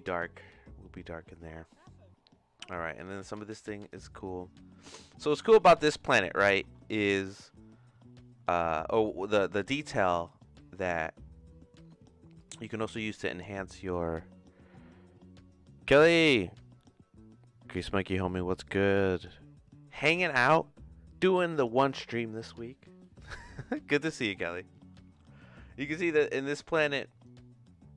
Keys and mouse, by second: 3.0 click, 5.6 middle click, 6.5 middle click, 9.7 middle click, 26.9 click.